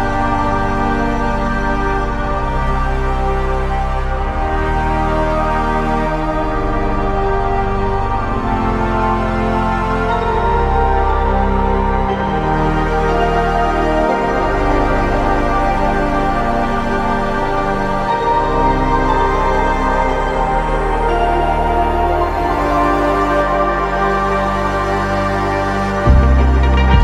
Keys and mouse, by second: 3.8-5.1 typing, 7.6 double click, 13.1 double click.